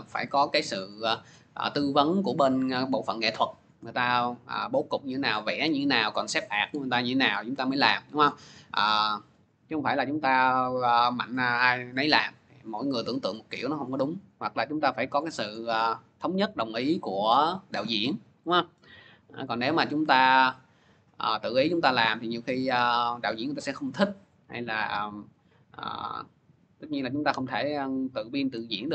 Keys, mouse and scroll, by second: 0.4-5.5 drag, 5.5 click, 8.6 click, 10.2 click, 14.1 click, 15.2-17.5 drag.